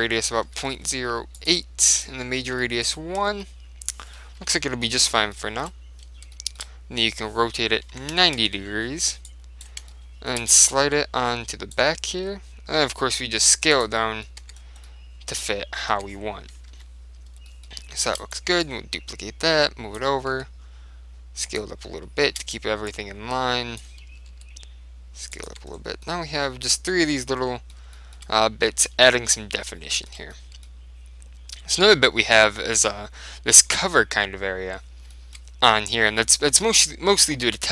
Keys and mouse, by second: 2.0 click, 4.5 KP_3, 6.5-8.4 middle drag, 7.2 r, 9.4-12.5 drag, 10.0-11.7 middle drag, 12.3 s, 13.9 click, 14.5 Tab, 14.7-16.6 middle drag, 16.1 Tab, 16.8 KP_3, 17.6-18.7 middle drag, 18.1 shift+d, 18.7 click, 20.4 s, 21.7-24.7 drag, 22.4 shift+d, 24.4 s, 25.5 click, 25.6 Tab, 26.1-27.8 middle drag, 27.9-32.1 middle drag, 35.2-37.0 middle drag.